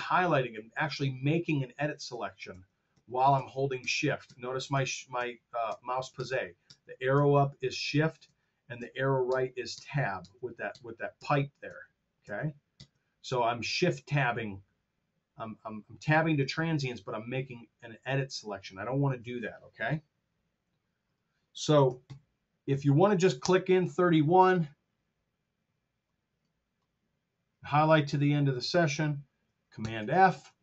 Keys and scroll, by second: 1.6 shift+Tab, 21.9 KP_3, 22.0 KP_1, 23.4 Return, 29.7 super+f.